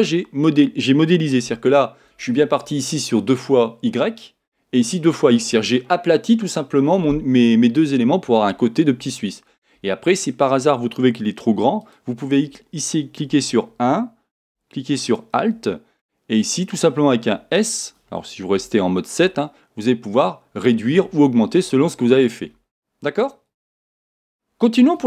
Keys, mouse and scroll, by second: 1.4 KP_7, 11.8 alt+click, 13.3 1, 15.0 alt+click, 16.0-25.0 middle drag, 18.6 KP_7, 19.2 s, 21.0 Escape.